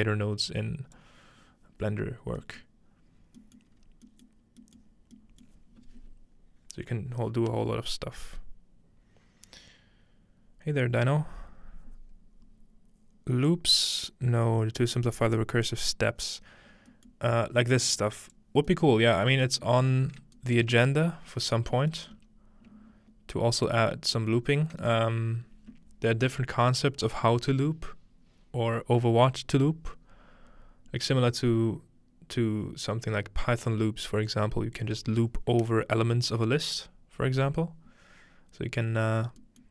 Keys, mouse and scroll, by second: 0.0-1.1 drag, 2.6 middle click, 3.2-3.7 scroll down 3, 3.6 middle click, 3.7 scroll up 2, 3.8 scroll down 2, 3.9 scroll up 1, 6.4-8.4 middle drag, 17.1 middle click, 17.3-21.3 scroll up 2, 17.9 click, 22.2 g, 23.7 click, 24.4-25.8 scroll down 1, 26.1-27.7 middle drag, 26.1-26.4 scroll down 1, 38.2-39.7 scroll down 6, 39.5 middle click.